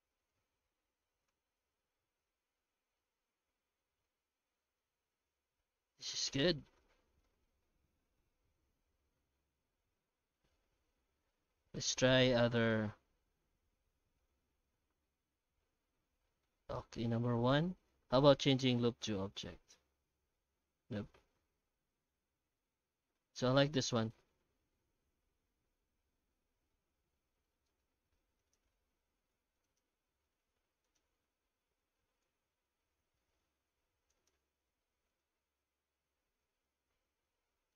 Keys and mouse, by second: 2.2 alt+shift+z, 3.0-4.0 middle drag, 4.4 shift+middle click, 4.8-6.8 middle drag, 7.2 shift+middle click, 8.2 F9, 23.7-27.4 middle drag, 27.7-28.4 shift+middle drag, 28.4 right click, 28.7 Tab, 29.0 alt+shift+z, 29.5 Tab, 29.6 right click, 29.9 Tab, 30.3 Tab, 30.8 right click, 31.2 Tab, 32.2 shift+z, 33.3 shift+z, 34.7 q, 35.9 Tab, 36.4 alt+shift+z, 36.6 shift+q.